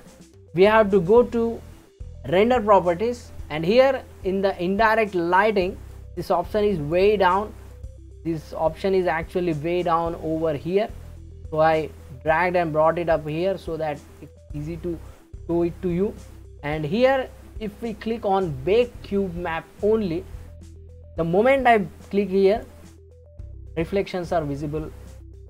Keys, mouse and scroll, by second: 2.2 click, 5.9-6.9 drag, 7.7-8.1 drag, 8.1-9.0 scroll down 2, 9.0-10.0 scroll down 3, 10.0-13.0 drag, 14.2 click, 14.7-17.8 scroll down 1, 22.5-24.1 drag, 24.1-25.4 middle drag.